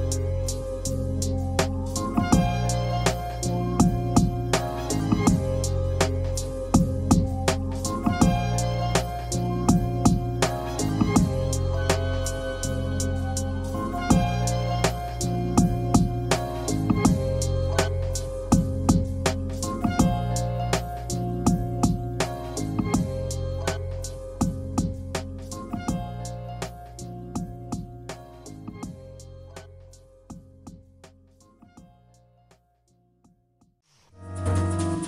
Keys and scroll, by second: 0.6 space, 2.2 ctrl+a, 2.2 w, 5.2 space, 5.3 Escape, 8.3 b, 8.7 ctrl+a, 9.2 space, 9.3 Escape, 10.8 b, 15.3 space, 16.2 b, 16.6 ctrl+a, 17.0 space, 17.2 Escape, 21.3 space, 22.4 b, 22.8 Escape.